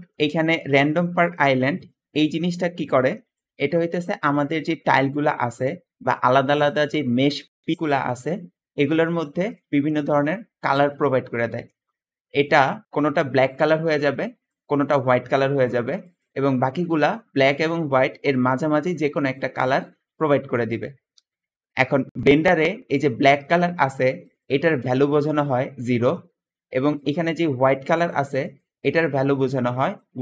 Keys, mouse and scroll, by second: 0.7 `, 11.8 Escape, 21.9 Escape, 22.4 Escape.